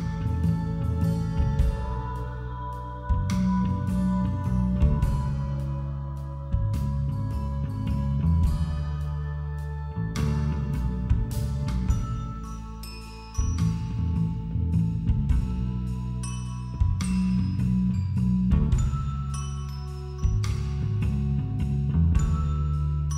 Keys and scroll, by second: 7.8 ctrl+i, 8.1 ctrl+=, 8.2 ctrl+-, 8.4 ctrl+=, 8.7 space, 10.1 ], 13.3 [, 14.7 [, 21.4 ctrl+i, 22.5 ].